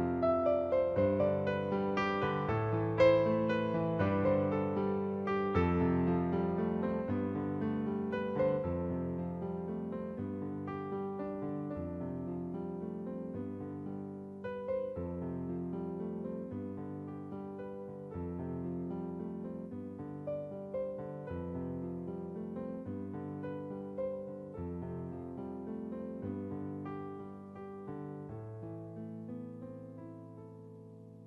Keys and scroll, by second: 28.3 [, 30.1 ].